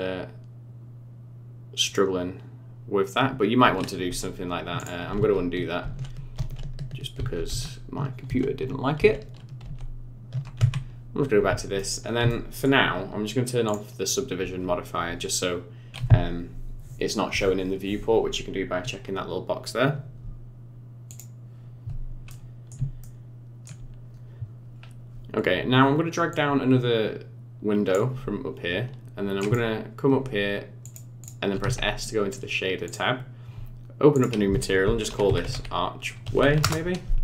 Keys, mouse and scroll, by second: 4.8 click, 5.9 ctrl+z, 6.4 ctrl+z, 6.7 ctrl+z, 7.5 ctrl+z, 7.9 ctrl+z, 8.6 ctrl+z, 9.3 ctrl+z, 9.9 ctrl+z, 10.6 Tab, 11.4-11.8 scroll down 4, 11.8 middle click, 12.3 shift+middle click, 13.7 click, 14.8 scroll down 5, 22.3 middle click, 23.0 shift+middle click, 24.0 scroll down 4, 24.8 scroll up 2, 26.3 click, 31.2 click, 32.8 click, 34.1 click.